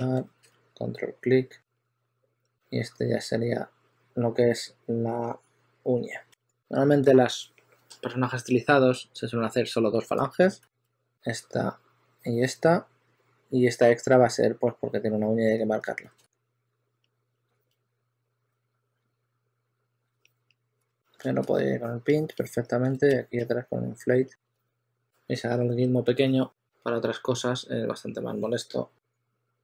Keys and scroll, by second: 0.1 w, 5.9 w, 10.0 2, 10.5 s, 10.9 shift+super+d, 11.0 shift+super+d, 15.7 shift+super+x, 16.2 2, 16.6 w, 18.0-20.8 typing, 23.8-26.0 typing.